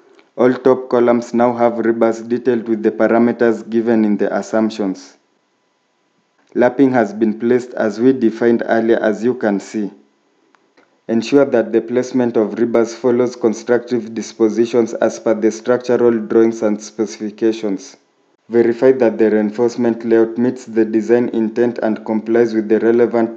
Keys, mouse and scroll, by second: 0.6-2.7 scroll up 1, 4.3 scroll down 1, 5.7 scroll up 1, 9.5 scroll down 1, 15.6 shift+middle click, 20.0 scroll up 1, 22.1 scroll down 1.